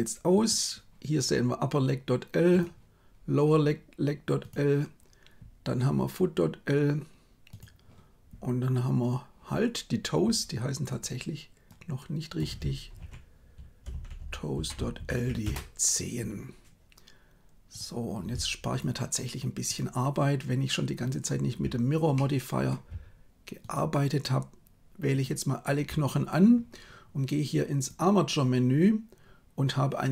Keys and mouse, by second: 0.3 right click, 10.9-15.4 drag, 22.0 middle click, 23.5 shift+right click, 25.0 shift+right click, 27.8-30.1 drag.